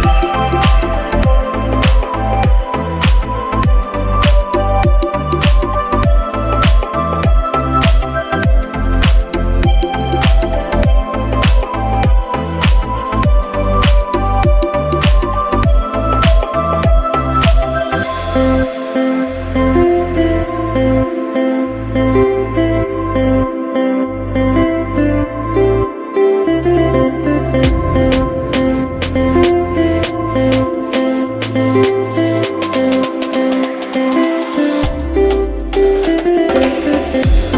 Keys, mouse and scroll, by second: 1.1-1.5 scroll up 4, 1.7-2.4 scroll down 3, 2.7 scroll down 1, 2.7 g, 5.5 middle click, 6.1-6.6 scroll up 2, 6.4 middle click, 7.6 scroll down 1, 8.4-8.7 scroll down 5, 8.7 scroll up 3, 10.3 click, 11.5 scroll down 1, 11.9 click, 12.6-13.5 scroll down 6, 13.3 scroll up 6, 14.0 click, 17.5 middle click, 18.1 click, 18.4 scroll up 1, 19.1 scroll down 2, 19.5 scroll down 1, 20.1-20.5 scroll down 2, 20.7 click, 21.5 scroll down 2, 21.9 scroll up 3, 22.7-23.2 scroll up 2, 23.2 click, 23.9 scroll down 1, 24.2 click, 24.5-25.0 scroll down 3, 24.8 middle click, 25.2 scroll up 1, 26.2 scroll up 5, 26.2 g, 28.0-28.6 scroll down 3, 28.4 click, 29.1 KP_1, 29.5-29.9 scroll down 9, 30.5 scroll up 3, 30.8 click, 31.5 middle click.